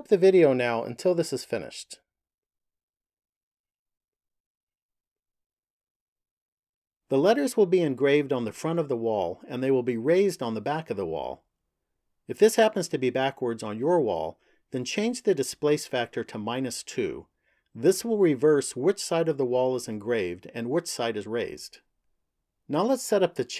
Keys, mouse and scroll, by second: 5.0 click, 8.3 middle click.